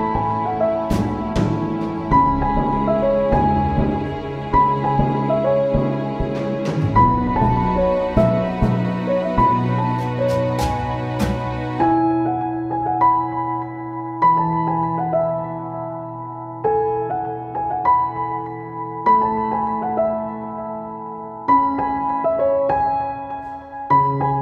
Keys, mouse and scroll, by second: 4.5 ctrl+s, 6.0 ctrl+-, 7.2 ctrl+-, 8.0-12.2 drag, 13.7 right click, 15.4-19.5 drag, 21.8-24.4 drag.